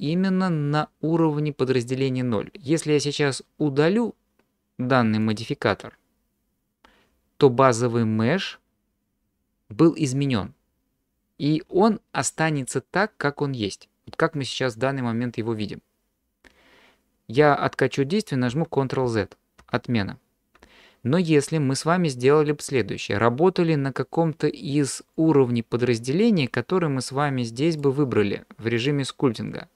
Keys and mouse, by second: 5.2 click, 18.5 ctrl+z, 19.0 ctrl+z, 19.6 ctrl+z, 27.8-28.9 drag.